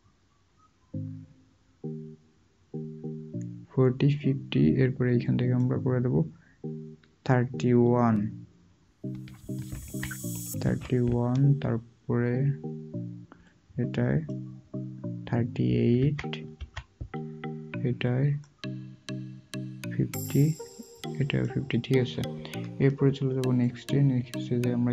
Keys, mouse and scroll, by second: 9.7-10.6 typing, 16.0-16.5 typing.